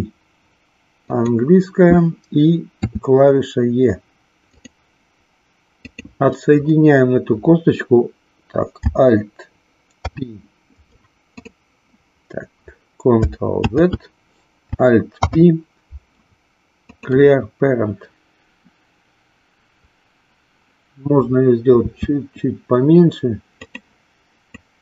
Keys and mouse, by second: 1.2 click, 2.8 e, 5.8 click, 9.9 alt+p, 13.5 ctrl+z, 15.2 alt+p, 21.8 s, 24.6-24.8 drag.